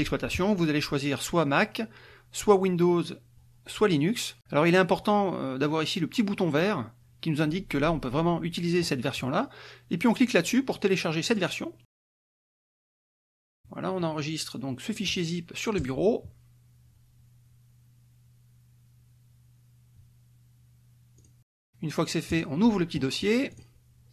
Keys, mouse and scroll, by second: 0.5 scroll down 1, 11.3 click, 15.8 click, 21.2 click, 22.3 click, 23.5 click.